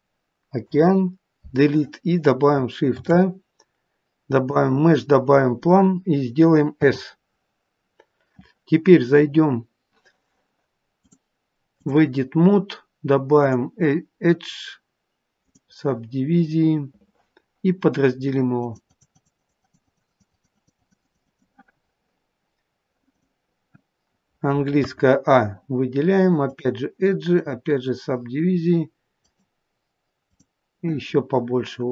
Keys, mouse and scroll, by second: 0.7 Delete, 3.5 shift+a, 6.8 s, 10.9 click, 13.3 click, 16.6-17.0 scroll up 3, 18.5 click, 18.9 click, 19.0 click, 19.3 click, 19.5 click, 19.7 click, 20.0 click, 20.2-23.3 click, 24.8 a, 26.4 click, 29.1 click.